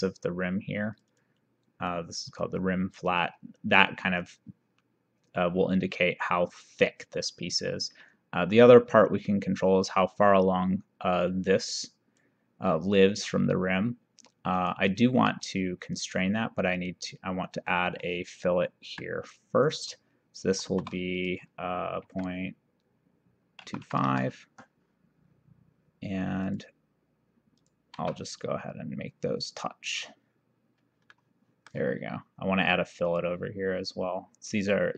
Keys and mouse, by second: 1.0 click, 2.4 click, 8.1 click, 14.6 click, 15.9 click, 18.9 Escape, 19.6 click, 20.7 shift+r, 22.1 KP_Decimal, 23.7 KP_2, 23.9 KP_5, 26.5 click, 27.7 click, 28.1 c, 29.5 click, 31.2 middle click, 33.1 click, 34.7 click.